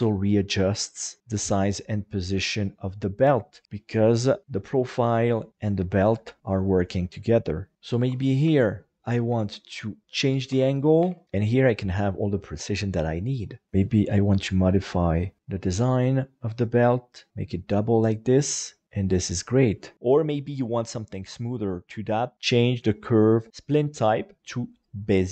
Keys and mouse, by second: 3.9 click, 8.0 alt+a, 8.4 b, 9.3 g, 10.1 click, 10.5 alt+a, 11.0 b, 11.2 g, 11.8 click, 13.7 g, 15.0 click, 17.3 alt+z, 18.3 middle click, 22.3-24.7 drag.